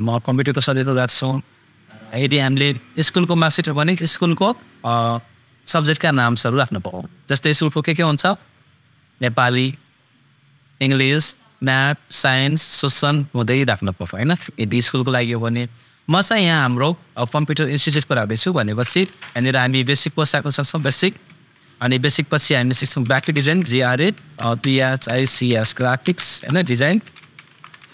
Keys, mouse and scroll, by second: 19.1 shift+super+b, 19.4 super+a, 19.6 super+s, 20.0 super+c, 21.2 super+Tab, 23.0 shift+super+g, 23.2 super+r, 23.3 super+a, 24.1 super+p, 24.8 super+h, 24.9 super+i, 25.1 super+c, 25.5 super+s, 26.1 super+BackSpace, 26.6 super+space, 27.1 super+e, 27.3 super+i, 27.5 super+n.